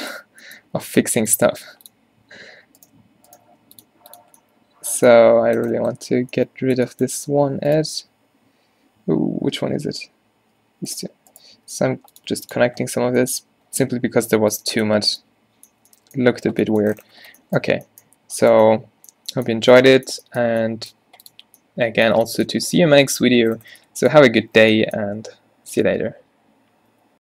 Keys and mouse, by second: 0.7 w, 2.4 Tab, 2.6 Tab, 3.5 w, 4.2 click, 5.3 z, 5.9 a, 6.2 a, 8.8-9.9 drag, 9.1 a, 9.2 a, 10.9-12.9 drag, 11.7 w, 12.7 Tab, 13.0 z, 14.2 a, 16.4 a, 17.8 a, 21.1-21.7 middle drag, 23.3-27.2 drag.